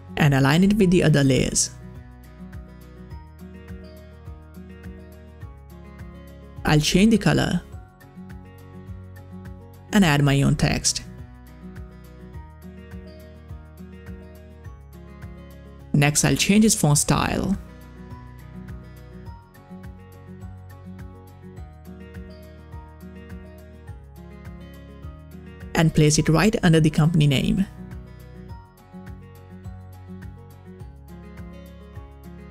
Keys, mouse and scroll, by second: 0.4 scroll up 1, 0.6-3.8 drag, 6.1 click, 6.2 scroll down 1, 6.7 click, 7.4 ctrl+v, 9.1 click, 11.2-11.5 typing, 12.5 ctrl+a, 12.6-14.4 typing, 15.5 ctrl+a, 16.5 click, 16.6-18.0 typing, 18.6 click, 19.3 click, 19.4 click, 21.4-24.0 drag, 24.0 Down, 26.5-29.4 drag, 30.1 click, 31.2-32.5 typing.